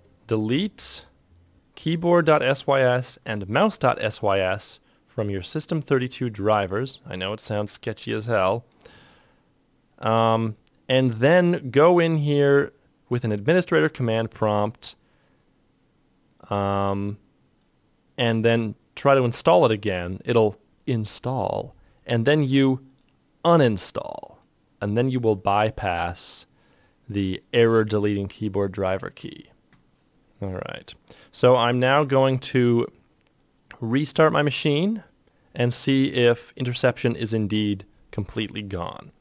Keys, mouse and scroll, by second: 29.6-30.4 typing.